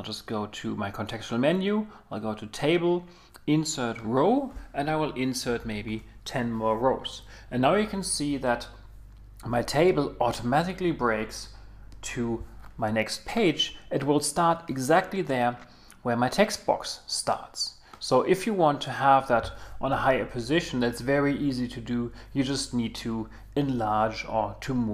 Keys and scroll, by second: 5.6 Return.